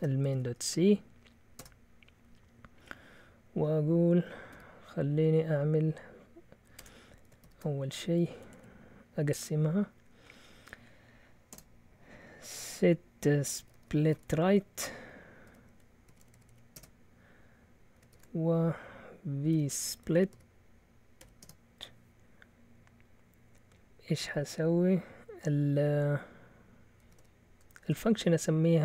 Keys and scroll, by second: 0.0-0.8 typing, 1.5 Return, 4.5 a, 6.7 Escape, 7.4-9.0 typing, 13.4-21.4 typing, 26.8-27.8 typing.